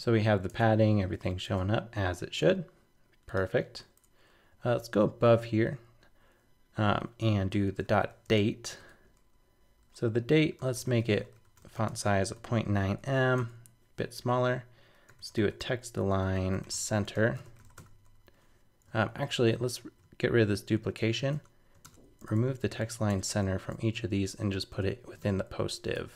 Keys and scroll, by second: 19.1 shift+super+Left, 19.8 super+c, 21.3 super+BackSpace, 22.8 super+Right, 23.1 super+BackSpace, 25.2 super+v, 25.9 super+Tab.